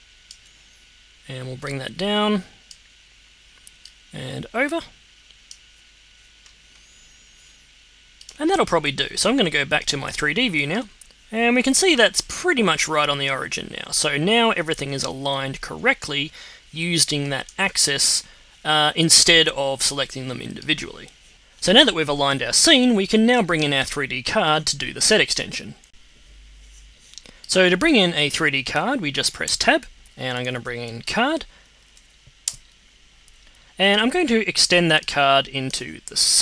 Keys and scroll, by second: 29.4 Tab, 30.0-31.3 typing, 31.6 Down, 32.4 Return.